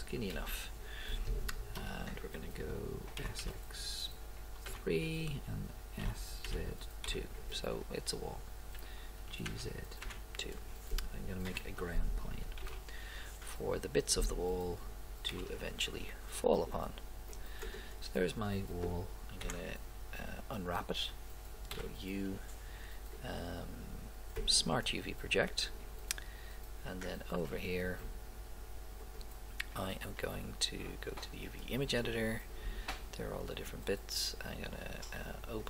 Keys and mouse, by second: 0.4 KP_1, 1.8 KP_5, 3.2 s, 6.0 s, 8.8 g, 11.6 KP_7, 12.6 shift+a, 15.3 s, 17.8-18.9 right drag, 19.4 Tab, 21.7 u, 27.1 middle click, 35.6 click.